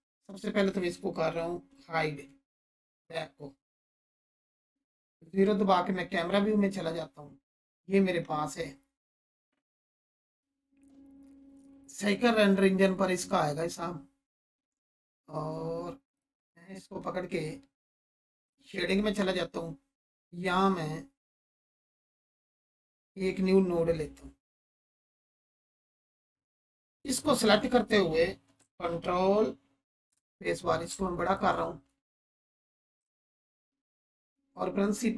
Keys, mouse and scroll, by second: 2.3 h, 5.4 0, 10.3 click, 16.1 click, 18.5 click, 21.2 click, 25.8-26.4 click, 30.1 ctrl+space, 30.9-31.5 alt+shift+click, 32.0 ctrl+space, 32.2 ctrl+click, 33.0 ctrl+space, 33.8-34.5 alt+shift+drag.